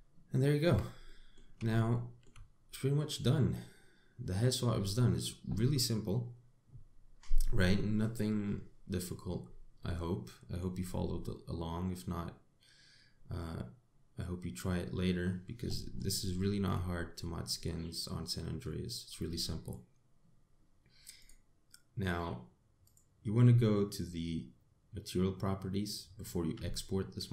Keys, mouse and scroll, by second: 0.3 scroll down 3, 0.9-1.3 scroll down 1, 1.3 Tab, 1.7 middle click, 2.5 shift+middle click, 3.2-3.9 scroll down 2, 3.9 middle click, 10.1-10.5 scroll up 2, 10.5 middle click, 11.5 scroll down 3, 12.0 middle click, 17.1 shift+middle click, 17.6 scroll up 4, 18.2 middle click, 19.6 scroll down 2, 19.9 middle click, 21.8 click, 23.5 click.